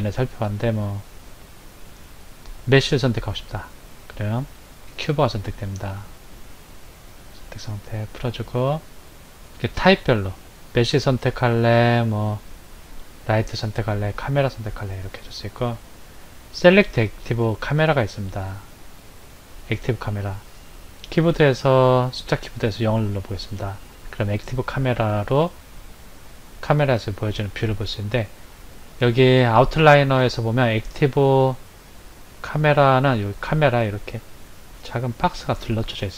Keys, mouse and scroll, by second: 7.2 click, 8.2 click, 22.9 KP_0.